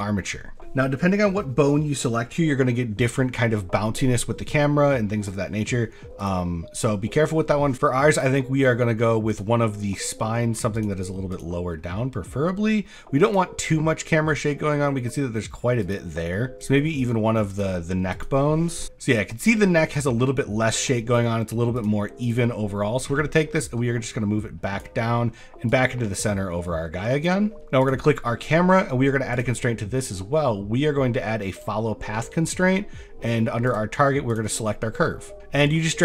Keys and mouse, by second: 6.4-8.2 drag, 9.4 click, 10.9 click, 11.9 middle click, 15.8 click, 16.7 click, 18.1 click, 20.3 click, 21.8 click, 22.2 click, 23.4 click, 25.1 click, 27.8 click, 29.4-31.6 drag, 32.3 shift+click, 33.7 click.